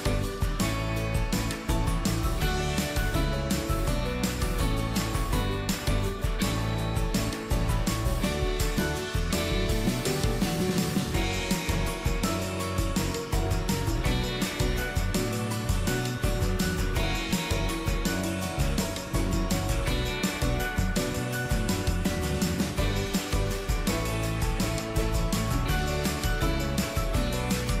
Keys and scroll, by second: 8.9 ctrl+d, 26.6 ctrl+d.